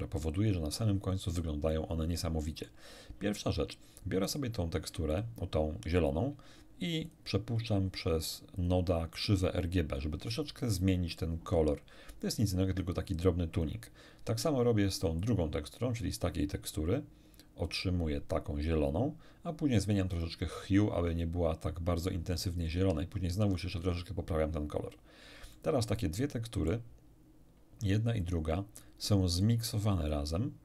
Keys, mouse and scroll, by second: 1.7-2.9 middle drag, 4.3 click, 5.1 ctrl+shift+click, 7.1 ctrl+shift+click, 8.5 click, 9.2-10.1 drag, 13.5 click, 15.2 ctrl+shift+click, 17.7 ctrl+shift+click, 20.1 ctrl+shift+click, 23.3 ctrl+shift+click, 25.5-26.9 middle drag, 28.2-29.0 drag, 29.4 click.